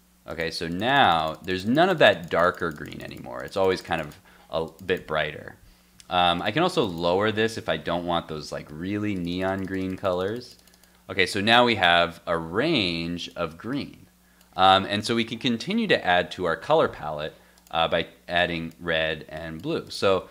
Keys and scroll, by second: 5.3 super+Tab, 6.0 super+s, 8.0 super+s, 8.3 super+Tab, 8.7 super+r, 12.5 super+Tab.